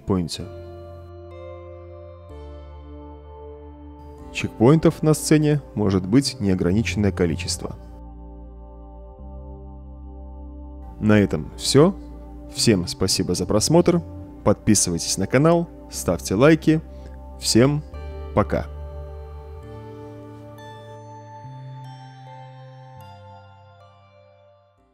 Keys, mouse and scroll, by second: 0.8-1.7 typing, 3.7 a, 4.7 a, 6.4 w, 8.9 d, 9.6 w, 12.6 d, 13.2 d.